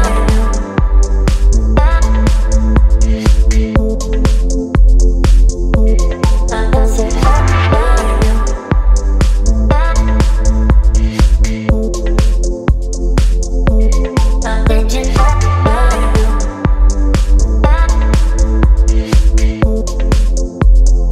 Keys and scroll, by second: 1.8 Return, 2.0 space, 5.6 KP_3, 6.4 ctrl+a, 6.5 KP_3, 6.8 Return, 8.6 ctrl+j, 12.3 Return, 13.8 space, 14.7 space, 15.8 p, 19.5 Return, 20.0 x, 20.1 Delete, 20.4 x, 20.8 ctrl+d.